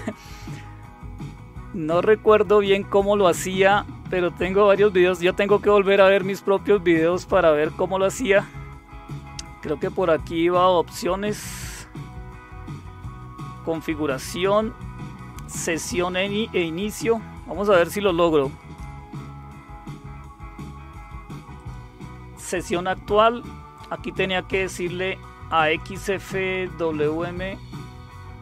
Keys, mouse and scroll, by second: 1.8 click, 15.9 click, 16.3 click, 21.5 click, 22.5 click, 24.6 click.